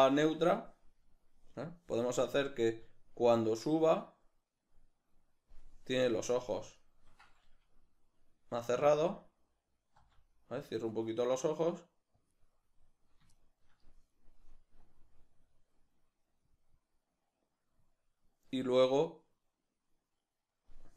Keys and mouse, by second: 6.8 shift+right drag, 12.2 g, 15.4-20.9 drag.